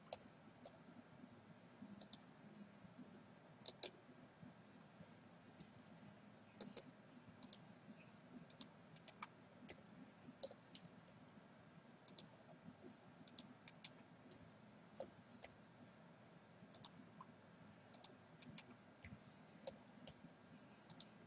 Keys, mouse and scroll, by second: 0.1 a, 0.6 c, 3.7-5.3 middle drag, 5.5 c, 8.9-10.8 right drag, 9.7 f, 10.4 a, 11.0 a, 11.1 c, 13.7-15.7 right drag, 14.3 f, 15.0 a, 15.5 c, 18.4-20.4 right drag, 19.0 f, 19.6 a, 20.2 c, 21.1 a.